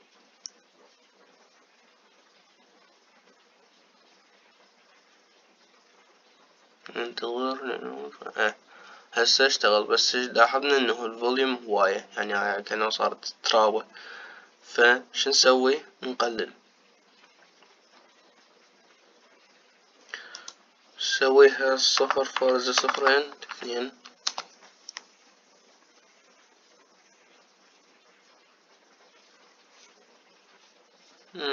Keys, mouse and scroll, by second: 21.1-23.6 drag, 23.6 KP_0.